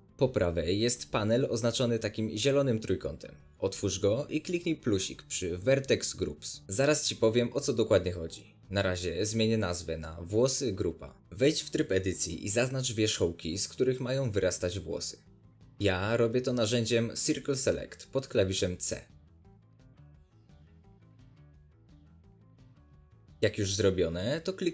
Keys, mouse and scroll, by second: 7.5-12.3 drag, 11.0 Tab, 12.3-14.8 middle drag, 13.4 alt+a, 14.8 click, 14.9 right click, 15.0 middle click, 15.3 c, 16.0 right click, 16.3-17.4 middle drag, 16.3 c, 17.4 right click, 17.5 middle click, 17.7 c, 18.4 click, 18.5-21.2 middle drag, 18.8 c, 19.7 c, 21.2 click, 21.3 right click, 21.4-24.7 middle drag, 22.4 scroll up 2.